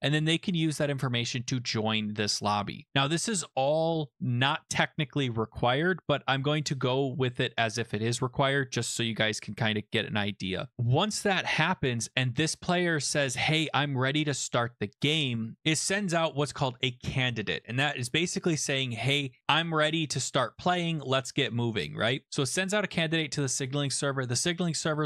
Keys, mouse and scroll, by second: 1.5 click, 12.4 click, 15.6 middle click, 22.9 click.